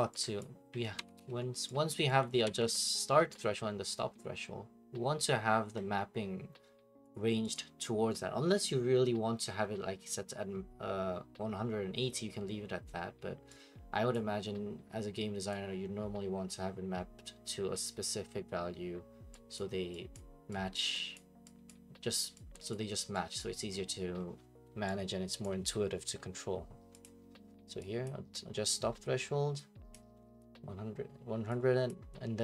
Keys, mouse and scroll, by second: 0.4 click, 1.0 ctrl+c, 1.2 ctrl+v, 1.9 click, 2.3 shift+click, 2.4 d, 2.7 middle click, 2.8 middle click, 2.8 middle click, 3.3 right click, 3.5 middle click, 7.1 click, 7.5 click, 14.1 click, 15.5 click, 19.5 click, 20.1 click, 20.7 click, 21.1 click, 21.7 click, 22.7 click, 23.4 click, 25.4 click, 27.0 click, 28.0 click, 29.9 click, 31.9 click.